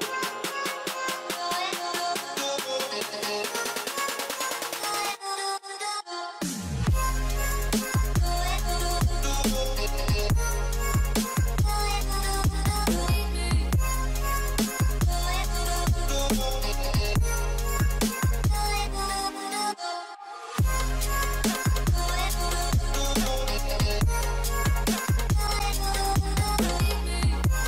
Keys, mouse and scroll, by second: 2.1 typing, 5.3-8.0 typing, 11.9 scroll down 1, 12.3 typing, 17.3-19.2 typing, 20.5 double click, 22.7 double click, 23.7 typing, 24.7 double click, 25.8 scroll down 1, 26.3-27.6 typing.